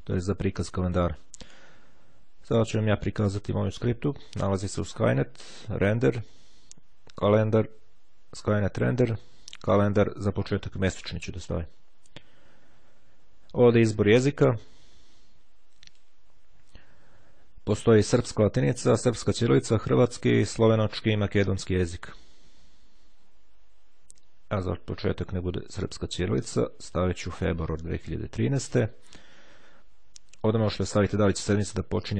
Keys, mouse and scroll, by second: 0.5-1.8 drag, 2.7 click, 10.5-11.8 drag, 14.1-16.3 drag, 24.4-26.1 drag, 26.8 click, 28.2 click.